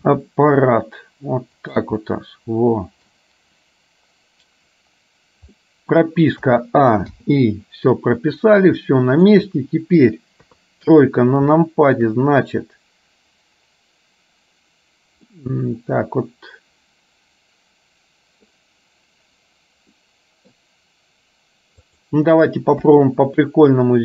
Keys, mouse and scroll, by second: 0.2 r, 2.1-3.2 middle drag, 5.7 middle click, 6.6 a, 7.3 i, 8.9 middle click, 10.6 KP_3, 11.7 shift+middle click, 15.3-18.6 middle drag, 19.9 middle click, 21.9 click, 22.9 KP_3.